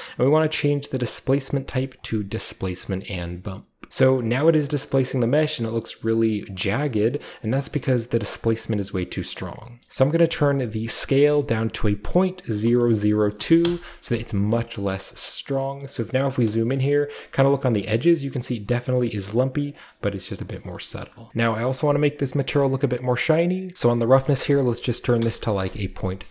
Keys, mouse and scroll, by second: 0.5 click, 2.0 click, 2.6-3.0 scroll down 2, 3.9-6.1 scroll down 5, 4.5-6.1 middle drag, 6.3-6.6 middle drag, 6.9 middle drag, 7.3-9.6 scroll up 2, 7.3 middle click, 7.9-9.7 drag, 9.6 scroll up 1, 9.8-11.1 middle drag, 11.0-13.4 drag, 13.4 typing, 13.6 Return, 14.5-18.9 scroll up 1, 15.1 shift+middle drag, 15.4-16.0 shift+middle drag, 16.1-16.6 shift+middle drag, 16.8 shift+middle drag, 17.1 shift+middle drag, 17.5-18.0 shift+middle drag, 18.2-19.8 shift+middle drag, 18.9-19.4 shift+scroll up 1, 19.4-21.3 scroll down 1, 19.9 shift+middle click, 20.6 shift+middle drag, 20.9-21.3 shift+middle drag, 21.8-22.3 middle drag, 22.3-23.7 scroll up 1, 22.4-23.9 middle drag, 23.7 scroll up 1, 23.9 click, 24.2 click, 25.1-26.3 typing, 25.2 Return.